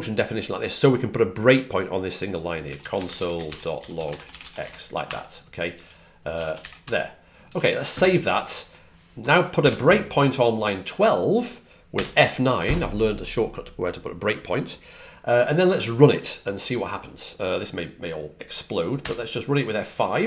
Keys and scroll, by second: 2.5-6.2 typing, 18.6-19.3 typing.